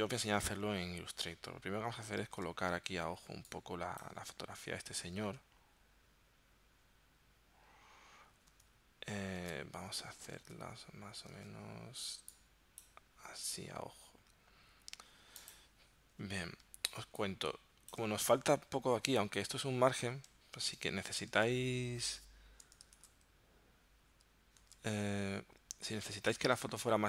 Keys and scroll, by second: 2.5 super+Tab, 5.2 super+Tab, 9.4 super+Tab, 10.4 super+Tab, 11.5 super+Tab, 16.7 space, 20.8 super+Tab, 21.4 super+Tab, 23.0 super+Tab, 24.6 super+Tab.